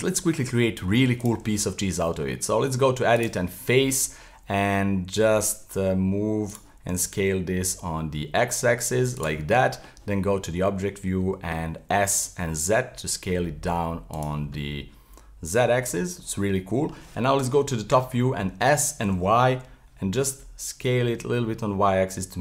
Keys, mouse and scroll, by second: 0.0 middle click, 0.1 Tab, 0.7 middle click, 1.2 right click, 2.2 Tab, 3.2 right click, 3.7 middle click, 4.1 s, 6.9 s, 9.4 middle click, 10.0 Tab, 11.2 s, 14.6-17.4 middle drag, 17.4 KP_7, 18.5 s.